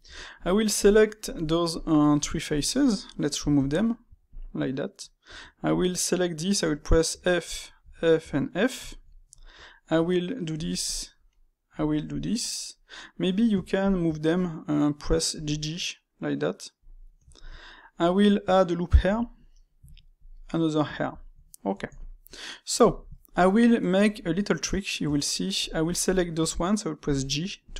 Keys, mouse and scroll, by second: 0.0 Tab, 0.7 click, 1.6 shift+click, 1.9-2.4 middle drag, 2.4 shift+click, 3.5 x, 4.5-5.2 middle drag, 5.2 Tab, 5.6 click, 6.1-7.0 middle drag, 7.0 f, 7.4 middle click, 7.7 f, 8.1 f, 8.8-10.4 shift+middle drag, 10.4 ctrl+r, 11.2-11.7 middle drag, 11.7 ctrl+r, 12.8-13.7 middle drag, 13.7 alt+shift+click, 15.2 g, 16.9-18.9 middle drag, 18.9 ctrl+r, 19.8 ctrl+r, 20.7-24.9 middle drag, 24.9 Tab, 25.5 click, 25.9 shift+click, 27.0 j, 27.6 click.